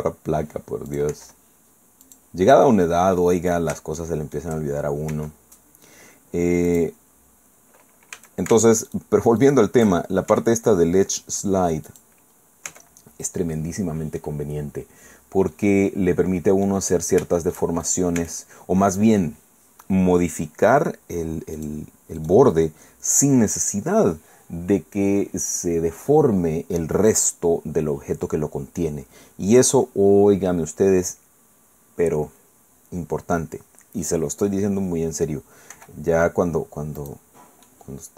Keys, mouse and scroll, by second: 0.9 click, 1.1 i, 2.0 click, 2.7-3.1 scroll up 1, 3.1 middle click, 4.0 shift+click, 4.5 shift+middle click, 5.1 e, 6.7 click, 8.1 a, 8.9 alt+shift+right click, 9.4 alt+shift+right click, 10.3 alt+shift+e, 11.9 click, 12.3-12.9 scroll down 2, 12.7 Tab, 13.5-14.8 middle drag, 14.8-15.5 scroll down 1, 15.5-16.8 middle drag, 17.4 shift+middle click, 17.8 shift+right click, 18.2 shift+Tab, 21.6 click, 22.2 click, 35.7 i, 37.0-38.1 drag.